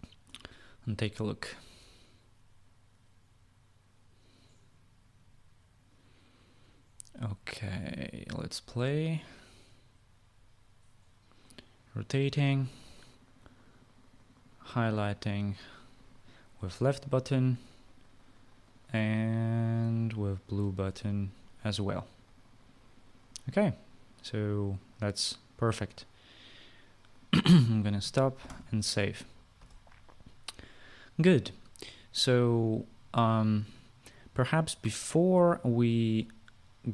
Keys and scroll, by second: 29.0 ctrl+s.